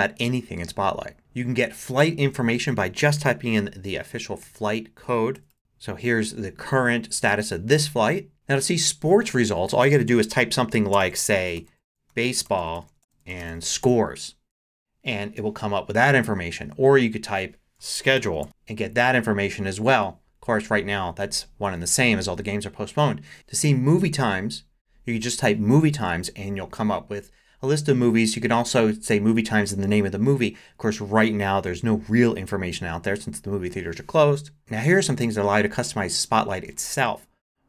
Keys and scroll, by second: 4.2-5.3 typing, 11.7 super+a, 11.8-14.3 typing, 17.6-18.9 typing.